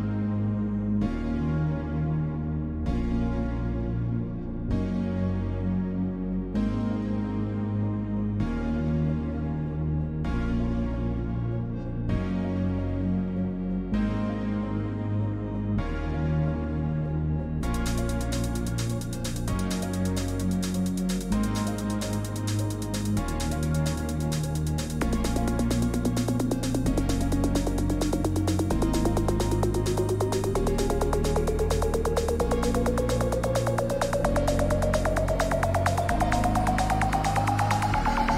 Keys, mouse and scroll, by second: 0.0-38.3 typing, 10.0 click, 10.8 click, 12.2 click, 15.2 click, 16.2 click, 16.9 click, 17.7 click, 21.4 click, 23.2 click, 24.5 click, 26.1 click, 29.1 Return, 30.8 click, 31.7 click, 33.2 click, 35.1 click, 35.9 click.